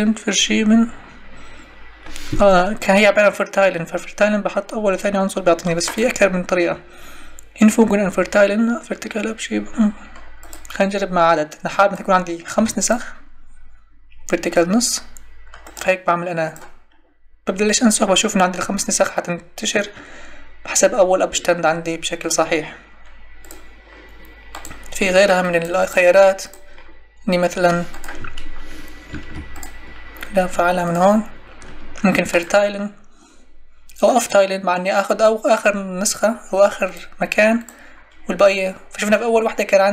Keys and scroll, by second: 12.5 5.